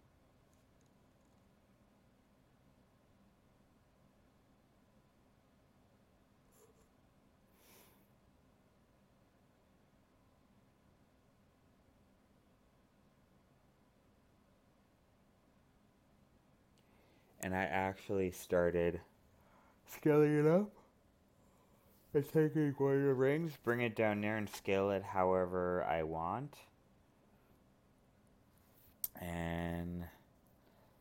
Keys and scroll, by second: 21.5 alt+space.